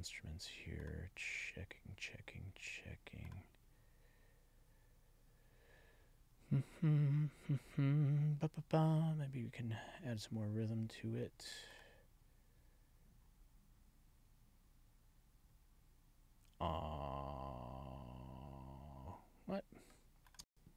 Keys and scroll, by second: 20.3 space.